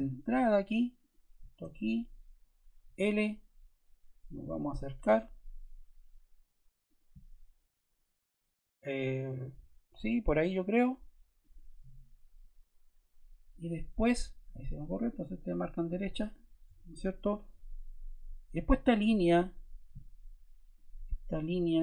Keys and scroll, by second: 1.5 Escape, 2.8 l, 16.6 Escape.